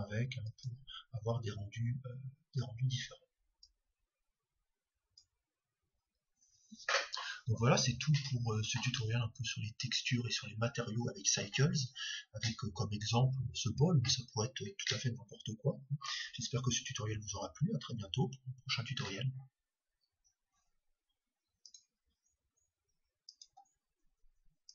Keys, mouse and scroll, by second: 4.6-6.1 drag.